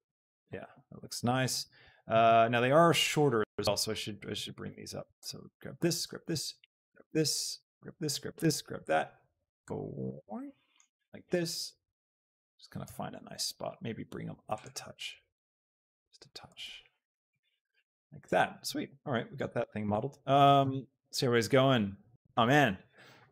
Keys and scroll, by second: 0.2 Tab, 2.0 shift+Tab, 17.9 Tab.